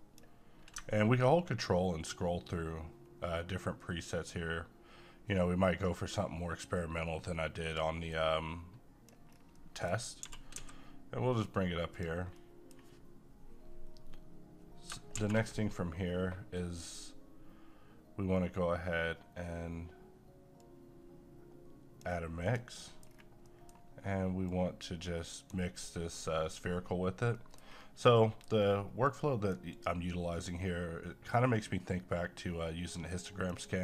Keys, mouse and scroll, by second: 1.1 scroll down 1, 2.1-2.7 ctrl+scroll down 1, 3.9-4.3 ctrl+scroll up 1, 5.0-5.8 ctrl+scroll down 1, 5.8 ctrl+scroll up 1, 6.6-7.7 ctrl+scroll down 1, 8.1 click, 9.3 scroll down 1, 9.6 middle click, 10.0 scroll up 1, 10.2 g, 10.5 x, 11.9 click, 12.4-15.1 middle drag, 15.1 a, 20.6-22.5 drag, 22.8 middle click, 23.0-23.4 scroll down 1, 23.4 middle click, 24.5-27.4 drag, 27.4 middle click, 27.7-28.2 scroll up 1, 28.2 middle click, 29.1-33.8 drag.